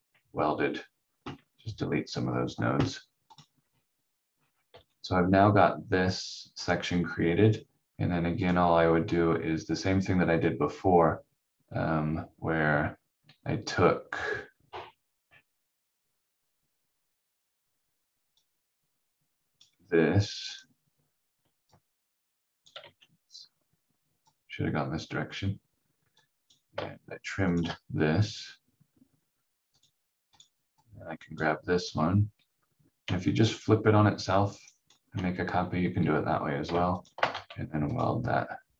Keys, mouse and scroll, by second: 3.3 click, 3.6 scroll down 1, 4.7 v, 5.8-7.5 scroll down 1, 8.4 click, 18.3 click, 22.8 ctrl+z, 24.2 click, 27.5 shift+click, 34.5 ctrl+right click, 37.0 shift+click, 37.3 w, 37.8 click.